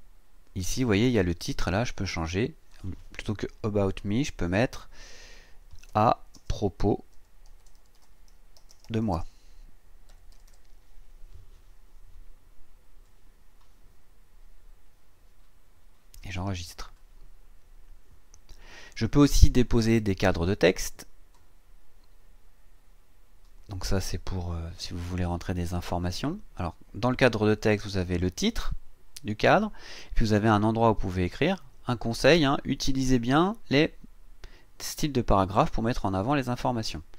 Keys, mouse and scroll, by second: 2.2 click, 5.9-10.9 typing, 14.6-14.9 scroll down 2, 15.4-16.2 scroll down 4, 16.7 click, 20.7-25.7 drag, 29.9 click, 33.1 click.